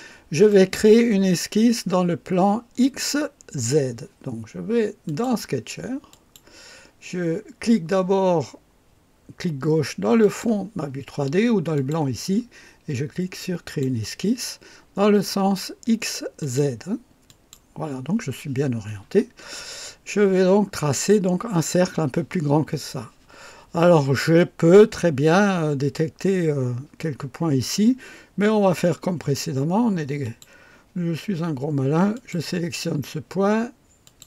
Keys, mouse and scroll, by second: 5.1 click, 6.1 click, 10.2 click, 11.8 click, 13.7 click, 16.4 click, 17.3 click, 19.6 scroll up 2, 30.2 click, 32.1 click, 34.0 click.